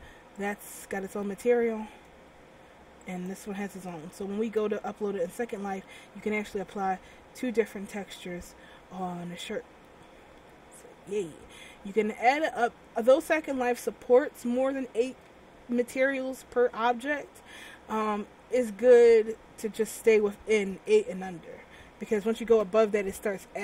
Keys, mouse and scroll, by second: 0.5 click, 0.9 middle click, 2.3 Tab, 3.2 right click, 3.8 Tab, 4.7 a, 5.4 middle click, 6.5 middle click, 12.2-12.7 scroll down 2, 12.7-14.0 scroll up 3.